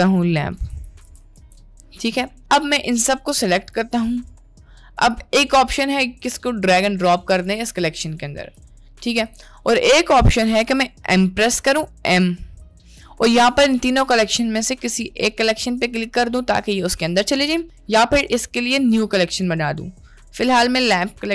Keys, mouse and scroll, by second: 2.9-3.9 drag, 5.2 click, 9.1 ctrl+z, 9.6 middle click, 12.2 m.